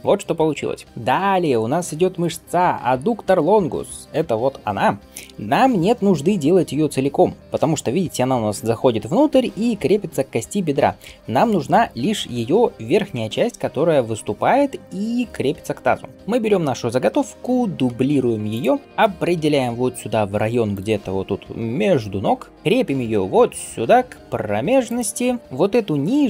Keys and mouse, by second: 0.7 Tab, 17.7 shift+d, 19.1 g.